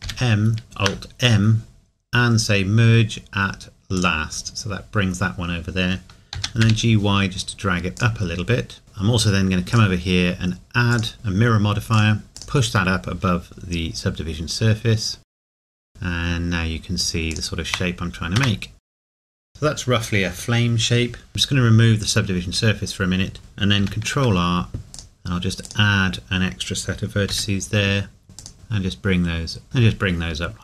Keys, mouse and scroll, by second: 0.0 ctrl+m, 0.6 alt+m, 4.0 click, 6.4 g, 8.0 click, 9.7 click, 15.2 click, 15.5 g, 17.3 click, 17.7 Tab, 18.9 click, 19.1 g, 19.3 Tab, 19.3 click, 21.3 Tab, 23.4 Tab, 23.8 ctrl+r, 24.9 ctrl+r, 25.0 click, 29.6 space, 30.2 scroll down 1.